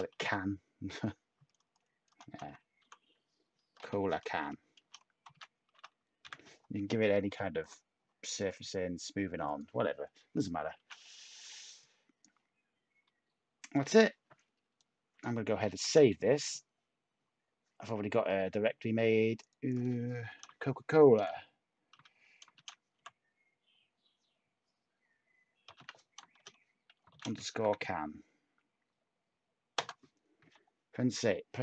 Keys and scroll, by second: 0.0-4.3 typing, 5.4-7.0 typing, 12.5 a, 15.8 s, 20.4-22.9 typing, 25.4-28.1 typing, 29.7 Return.